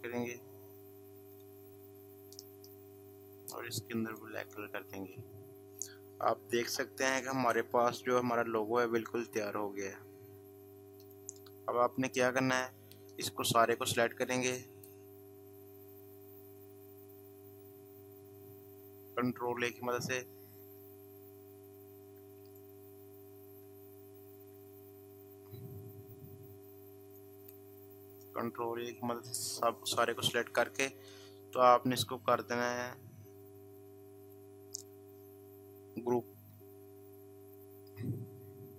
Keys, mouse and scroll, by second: 2.9 i, 4.1 click, 10.9 click, 11.0-17.2 drag, 22.5 click, 24.3 ctrl+z, 27.0 click, 34.2 click.